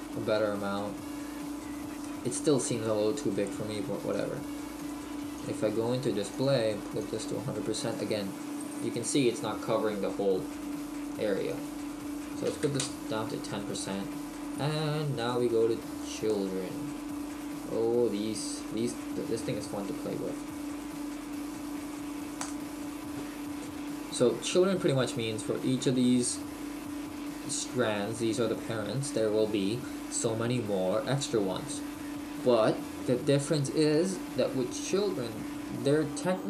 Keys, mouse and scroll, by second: 1.4 middle click, 7.1 click, 8.6 middle click, 12.9 click.